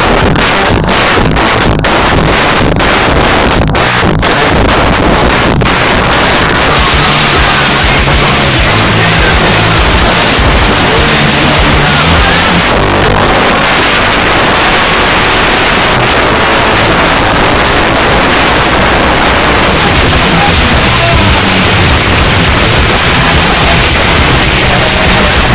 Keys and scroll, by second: 1.5 p, 1.7 Up, 2.1 Up, 2.6 Up, 2.8 Up, 2.9 Up, 3.0 Return, 12.6 Page_Down.